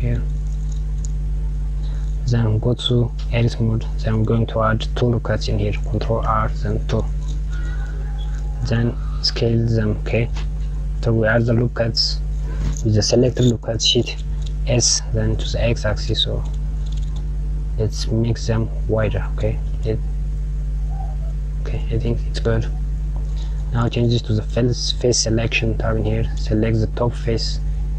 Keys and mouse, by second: 2.5 Tab, 5.4 ctrl+r, 24.0 click, 27.6 click.